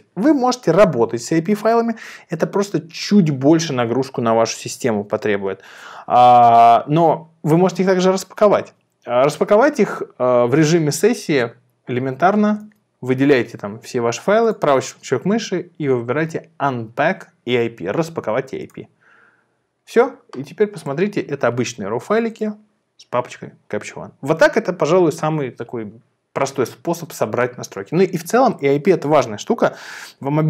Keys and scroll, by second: 12.7 super+a.